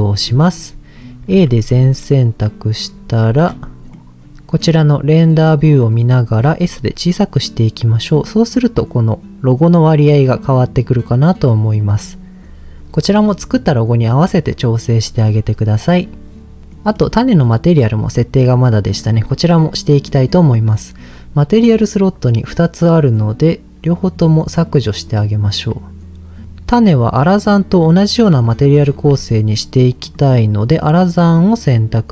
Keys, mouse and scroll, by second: 0.2-1.2 scroll up 1, 1.2 scroll up 1, 1.3 a, 2.9-3.2 scroll up 3, 3.9 middle click, 3.9 scroll up 3, 6.4 s, 11.6 click, 15.2 click, 16.6 click, 16.7 middle click, 17.9 click, 18.3 click, 18.9 click, 19.5 middle click, 24.0 click, 24.7 click, 25.1 click, 26.5 click, 27.3 click, 28.9 ctrl+z, 30.0-31.3 drag.